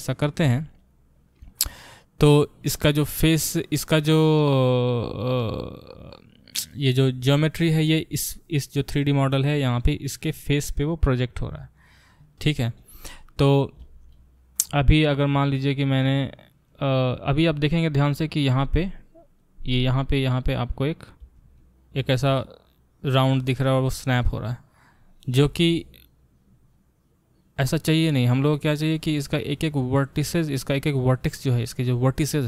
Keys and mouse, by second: 9.1-32.4 middle drag.